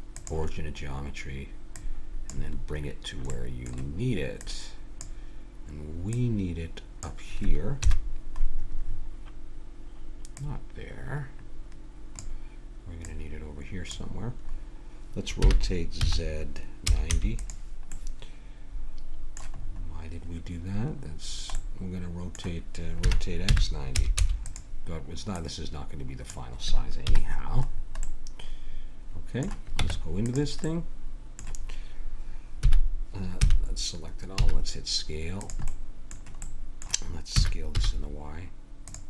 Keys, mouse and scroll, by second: 1.8-3.3 drag, 3.3-4.9 middle drag, 4.4-8.0 drag, 7.8 KP_7, 10.3-12.2 drag, 13.0-14.6 drag, 14.6-16.7 middle drag, 15.4 r, 17.9-23.5 middle drag, 23.0 r, 25.3-26.9 drag, 27.1 KP_Decimal, 29.8 Tab, 32.6 s, 33.4 a, 34.3 s, 35.7-37.3 drag, 37.3 s.